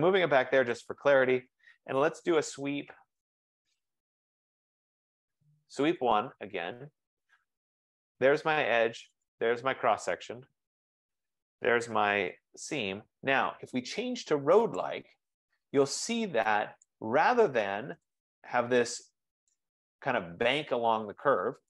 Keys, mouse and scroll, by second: 1.0 click, 2.2-5.3 typing, 5.9 Return, 5.9 click, 7.5-8.2 typing, 8.4 click, 9.3-10.0 typing, 9.4 click, 10.4 Return, 12.3 Return, 14.8 click, 17.1 click, 19.7 click.